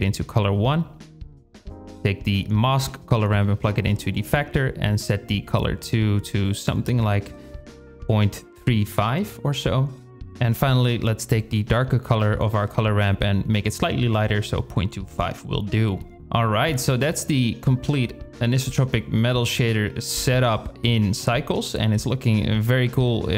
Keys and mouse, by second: 1.7 click, 2.6-2.9 shift+drag, 3.5 click, 9.0 click, 14.7 shift+click, 15.2-15.7 drag, 18.6 click, 19.7 shift+click, 21.4 click, 23.2 click.